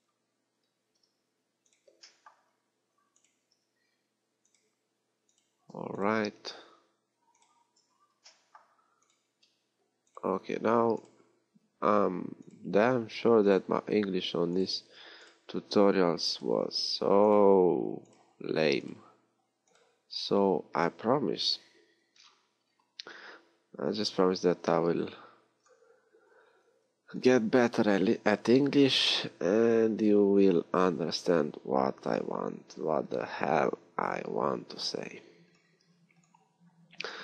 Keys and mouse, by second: 1.1 j, 3.7 j, 7.8 j, 10.6 j, 13.0 j, 15.0 j, 16.9 j, 18.6 j, 20.3 j, 22.2 a, 25.2 ctrl+r, 29.0 ctrl+r, 36.0 ctrl+r.